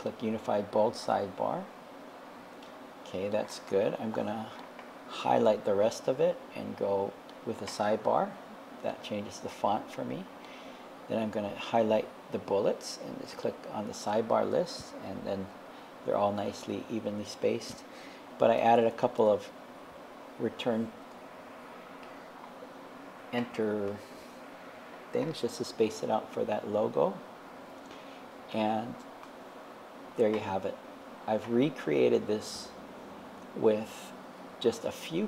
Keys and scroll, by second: 18.7 Return, 21.1 BackSpace.